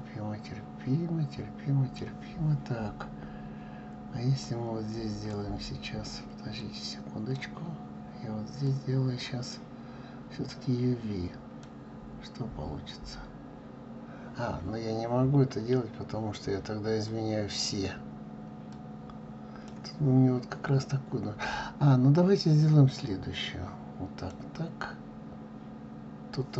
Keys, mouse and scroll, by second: 5.3 click, 7.4 click, 8.7-10.7 drag, 17.6-19.6 drag, 22.8 click.